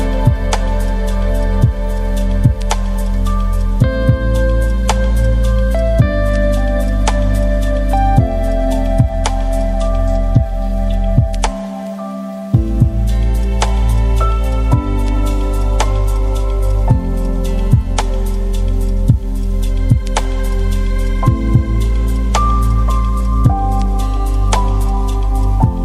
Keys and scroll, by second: 7.9 Escape.